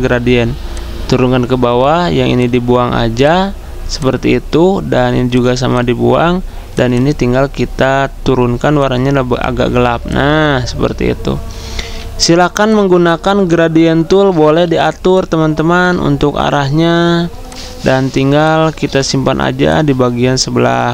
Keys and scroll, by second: 14.7 g, 18.6-19.3 typing, 20.7-20.9 typing.